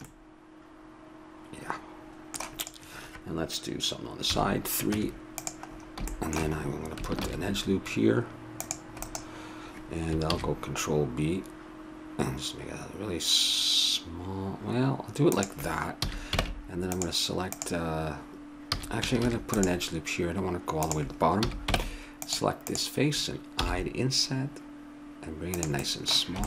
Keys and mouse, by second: 2.6-4.2 drag, 4.2 KP_3, 4.9 Tab, 7.2 ctrl+r, 10.3 ctrl+b, 16.0 a, 16.4 ctrl+Tab, 17.5-19.3 right drag, 18.7 a, 19.2 ctrl+r, 21.4 a, 21.7 ctrl+Tab, 22.7-23.8 right drag, 23.6 i.